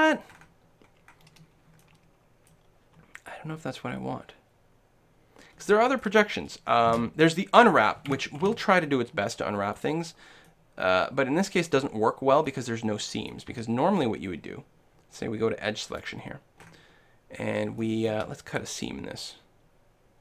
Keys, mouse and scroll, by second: 3.3 middle click, 5.6-7.3 middle drag, 6.9 space, 8.4 u, 10.5 middle click, 10.8-12.2 middle drag, 12.4-14.4 middle drag, 13.6 a, 15.9-17.8 drag, 17.8-19.7 middle drag.